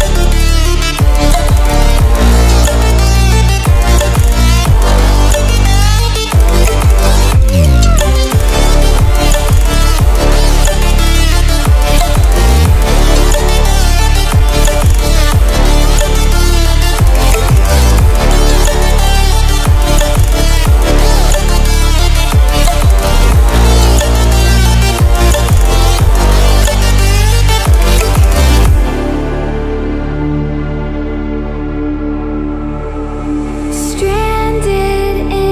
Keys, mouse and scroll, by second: 5.5-7.7 drag, 11.7-12.4 typing, 13.2 ctrl+w, 22.2 ctrl+w, 25.0 click, 29.1-35.5 drag.